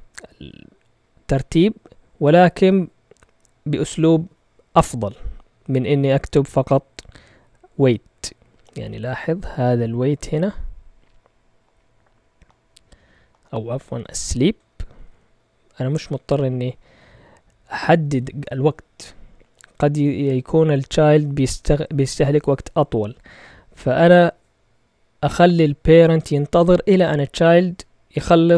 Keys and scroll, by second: 6.1 Up, 6.4 Up, 7.6 Up, 8.6 Return, 14.8 Up, 14.9 Up, 15.0 Up, 15.5 Down, 16.6 Right, 17.3 Right, 17.3 Right, 17.4 Right, 17.5 Right, 17.6 Right, 17.8 Right, 20.7 typing.